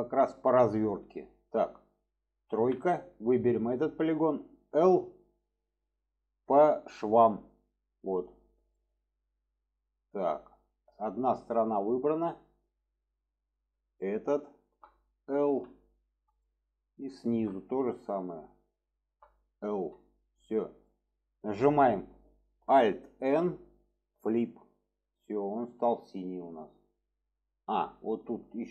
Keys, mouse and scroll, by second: 0.7 middle click, 3.3 click, 7.4-8.8 drag, 8.8-13.6 middle drag, 16.4-17.1 middle drag, 17.2 middle click, 20.9 middle click, 23.2 alt+n, 25.4-27.8 middle drag, 28.1 shift+middle drag.